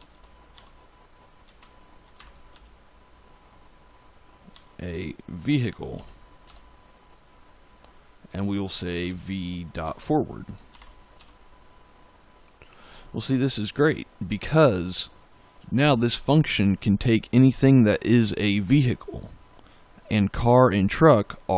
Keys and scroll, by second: 0.0-2.4 typing, 0.4 Tab, 4.4 Tab, 5.8 shift+[, 6.4 Return, 8.8 v, 9.7 Tab, 10.4-11.6 typing, 15.7 Return.